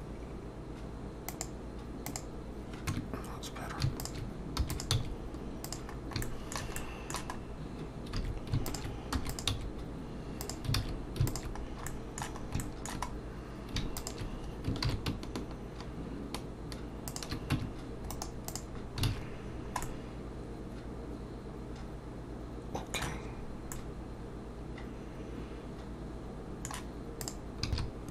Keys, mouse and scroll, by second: 3.0 Tab, 4.0 alt+shift+click, 4.6 e, 4.9 s, 5.9-6.2 scroll down 2, 6.2 shift+middle click, 6.8 middle click, 7.4 scroll up 2, 8.2 alt+a, 8.7 alt+shift+click, 9.1 e, 9.5 s, 10.8 alt+a, 11.3 alt+shift+click, 11.6 scroll down 2, 11.9 middle click, 12.6 shift+middle click, 13.1-13.5 scroll up 2, 14.0 alt+shift+click, 14.8 ctrl+b, 17.5 Tab, 18.1 right click, 18.8 scroll down 2, 19.1 alt+a, 19.4-20.5 scroll down 4, 19.8 middle click, 23.4-23.7 scroll up 1, 23.7 middle click, 27.2 Escape, 27.2 click, 27.7 shift+click, 27.8 n.